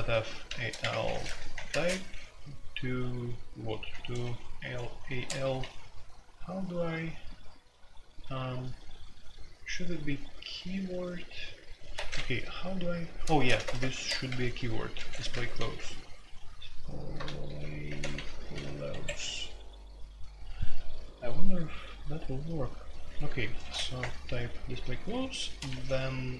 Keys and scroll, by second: 0.0-1.6 typing, 5.0-5.4 typing, 11.9 Escape, 13.3-18.6 typing, 18.9 Escape, 23.0-24.0 typing, 25.3-25.7 typing.